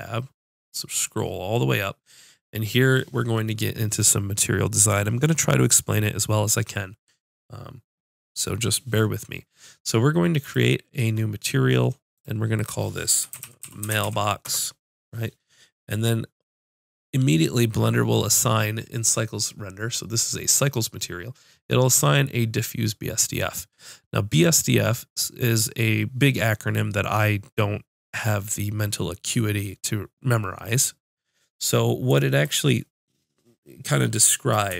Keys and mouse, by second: 10.4-13.9 drag.